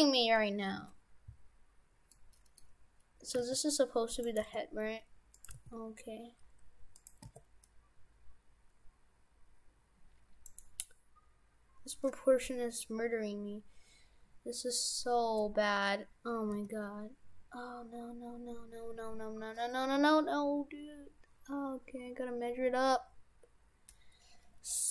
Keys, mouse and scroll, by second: 2.2 middle click, 2.2 w, 2.7-3.2 scroll up 3, 3.4 g, 4.4 g, 5.6 g, 7.3 s, 16.6 s.